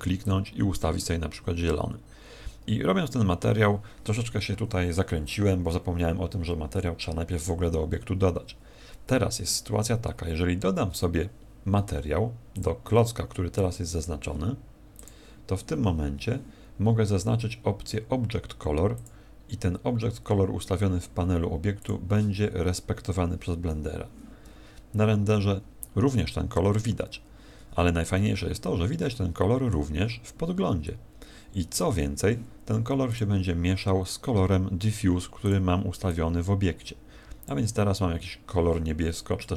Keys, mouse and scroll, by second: 12.5 click, 14.9 click, 18.9 click, 21.8 click, 27.6 Escape, 28.5 middle click, 33.0 click, 35.4 click.